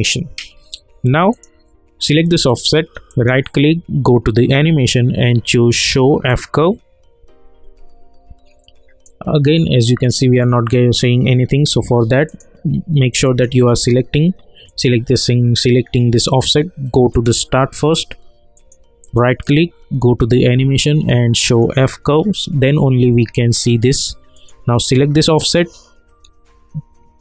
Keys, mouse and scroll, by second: 3.1 right click, 6.2 right click, 6.5 click, 8.7 click, 17.1 click, 19.0 right click, 21.4 click, 24.3 click, 24.4 click.